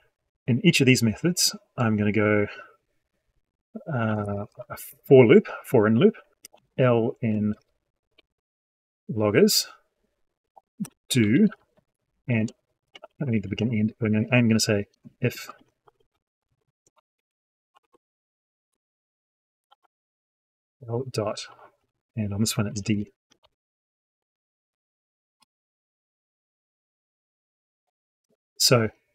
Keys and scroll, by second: 4.7 ctrl+j.